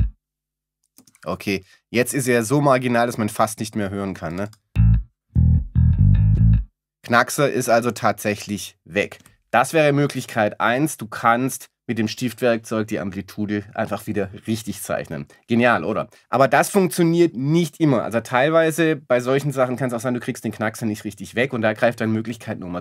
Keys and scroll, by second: 1.0 space, 6.8 space.